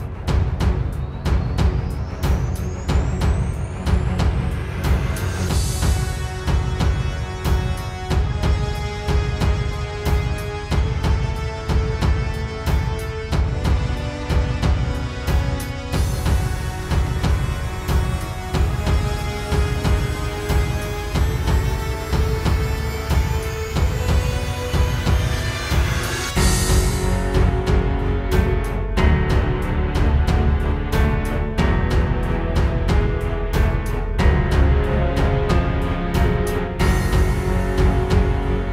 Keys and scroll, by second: 15.2 space, 15.8 space, 21.4 space, 21.8 space, 22.2 space, 22.7 alt+super+space, 37.5 space, 37.8 space, 38.3 space.